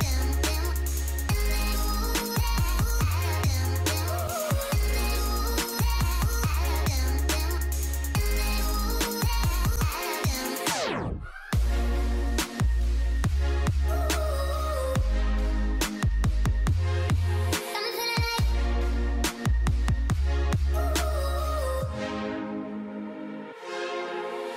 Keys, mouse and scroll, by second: 0.9 double click, 10.7 double click, 10.8-11.2 alt+scroll down 1, 12.7-13.3 alt+scroll down 1, 13.5-13.9 alt+scroll up 1, 14.7 alt+scroll down 1, 16.4-16.8 alt+scroll down 1, 17.7 ctrl+s, 18.7 Return.